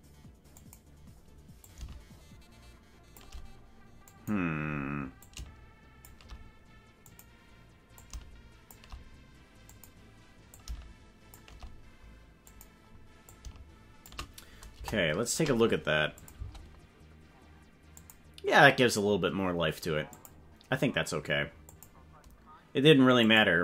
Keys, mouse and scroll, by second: 0.7 click, 1.7-3.2 shift+drag, 4.0 click, 5.2 shift+click, 7.0 click, 8.1 shift+click, 9.7 click, 10.5 shift+click, 12.5 click, 13.3 shift+click, 14.7 KP_0, 16.2 click, 16.3 space, 18.0 click, 20.1 click, 21.7 click, 23.2 click.